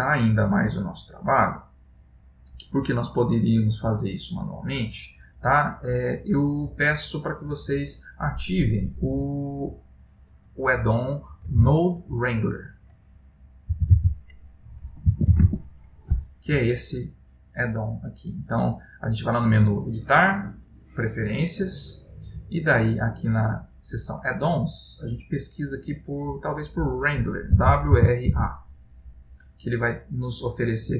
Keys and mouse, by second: 20.0 click.